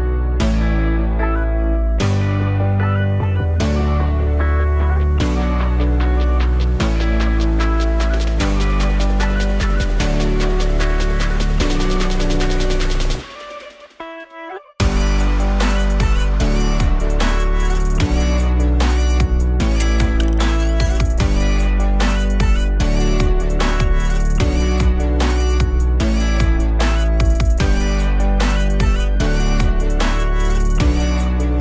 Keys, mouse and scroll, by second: 1.6-4.2 shift+drag, 6.5 click, 8.3 click, 8.8 click, 9.9 click, 10.2 click, 15.1-17.5 scroll down 1, 20.4 click, 22.6-24.1 middle drag, 24.1 click, 27.4 click.